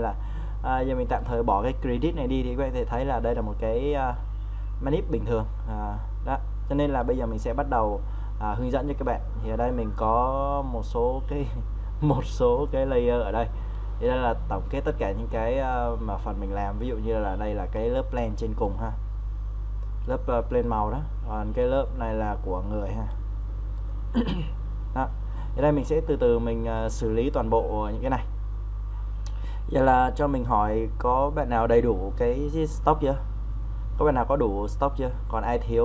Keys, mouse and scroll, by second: 2.5 Delete, 7.0-15.9 drag, 15.9-26.9 drag, 28.0 scroll down 1, 35.3-35.8 drag.